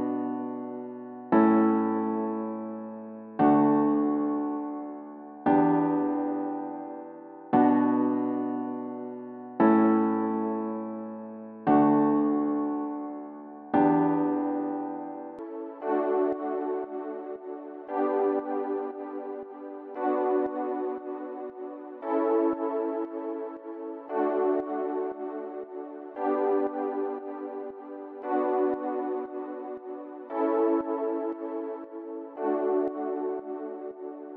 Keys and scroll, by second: 15.3 typing.